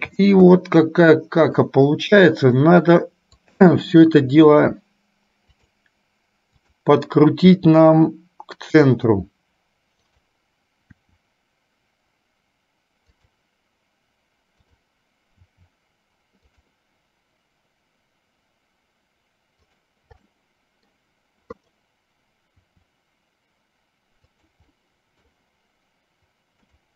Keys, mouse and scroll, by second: 0.8 middle click, 3.6 click, 4.4 r, 7.7 r, 10.2 click, 11.2 r, 15.7 r, 19.8 click, 20.4 middle click, 21.7 click, 22.8 r, 24.8 middle click, 26.7 click.